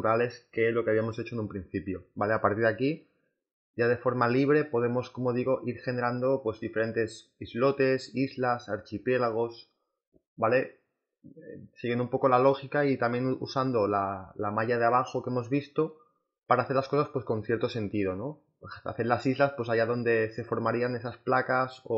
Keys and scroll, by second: 8.8 space, 10.3 ctrl+z, 11.0 ctrl+z, 12.8 ctrl+z, 13.0-16.8 typing, 17.4 ctrl+z, 17.8 space, 19.0 space, 20.1 e, 20.5 b.